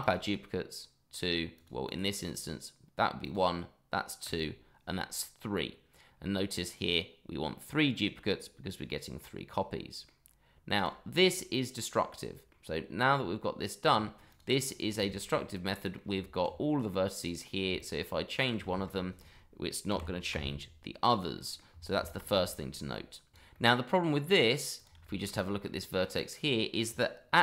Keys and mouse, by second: 0.0 click, 1.5 click, 1.8 click, 3.2 click, 4.2 click, 9.1-10.0 middle drag, 10.7 click, 11.2-12.5 middle drag, 13.1 Tab, 14.3 click, 14.7 click, 15.0 shift+middle drag, 15.3-15.9 middle drag, 16.7 middle drag, 17.2 click, 17.7 shift+click, 18.2 shift+click, 18.7 shift+middle drag, 19.9 g, 20.3 z, 21.0 click, 21.3 middle click, 21.9 ctrl+z, 22.4 shift+middle click, 22.9 middle click, 23.5-23.9 middle drag, 24.2 middle drag, 24.7 click, 25.0 shift+middle drag, 25.6-26.0 middle drag, 26.3-26.7 middle drag.